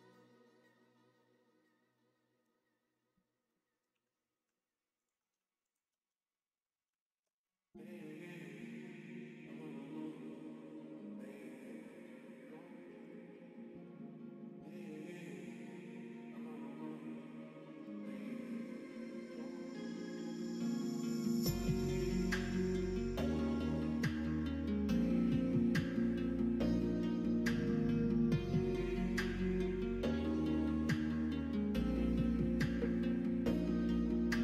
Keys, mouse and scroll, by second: 0.0-1.7 middle drag, 1.9 middle click, 3.4 middle click, 3.8 3, 5.0 alt+click, 5.6 alt+shift+click, 7.4 middle click, 8.7 alt+shift+click, 9.6 middle click, 14.2 middle click, 15.1 middle click, 17.7 alt+shift+click, 18.4 alt+shift+click, 18.7-19.7 middle drag, 20.6 s, 23.8 middle click, 25.2 click, 25.9 middle click, 27.0 shift+click, 27.4 middle click, 28.1 shift+click, 28.4 middle click, 29.2 shift+middle click, 29.9 middle click, 30.7 alt+z, 31.3 middle click, 32.6 shift+click, 34.2 s.